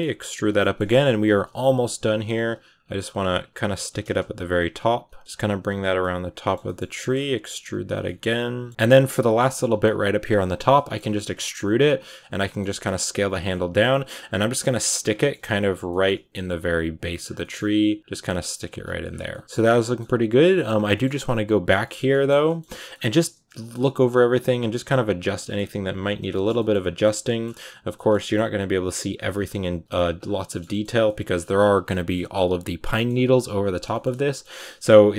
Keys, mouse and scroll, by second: 0.5 shift+middle click, 1.2-4.4 typing, 5.6 right click, 5.9-7.3 middle drag, 7.3 e, 7.9 middle click, 8.6 scroll up 1, 8.6 r, 8.7-11.2 middle drag, 11.2 e, 11.7 s, 12.2 middle click, 12.5 r, 13.3 middle click, 13.7 r, 14.1 g, 14.5 middle click, 14.9-15.7 scroll up 4, 15.0 middle click, 15.7 middle click, 16.0-21.0 typing, 17.3 middle click, 18.1 middle click, 18.9 scroll down 7, 19.1 middle click, 19.4 right click, 19.6 middle click, 20.8 middle click, 21.5-21.9 scroll down 3, 21.7 shift+middle click, 21.9 middle click, 22.8 scroll up 3, 23.2 right click, 23.4 middle click, 23.7 s, 24.3 r, 24.7 r, 25.2 middle click, 25.5 g, 26.0 scroll down 1, 26.2 shift+middle click, 27.0 a, 27.1 middle click, 27.3-27.8 scroll up 2, 27.8 shift+middle click, 28.6 right click, 29.1 r, 29.4 g, 29.8 middle click, 29.9 g, 30.3 scroll down 1, 30.3 shift+middle click, 30.8 a, 30.9 scroll up 1, 30.9 middle click, 31.4 scroll down 1, 32.0-33.6 middle drag, 33.6 right click, 33.8 shift+middle click, 34.3-34.7 scroll up 4, 34.7-35.1 typing.